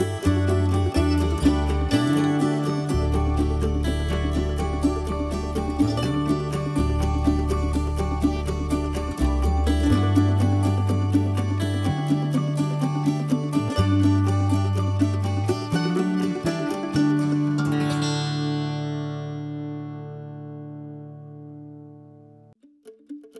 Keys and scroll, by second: 4.1 ctrl+s, 6.0 ctrl+z, 11.0 ctrl+s, 15.3 ctrl+z, 21.8 ctrl+z.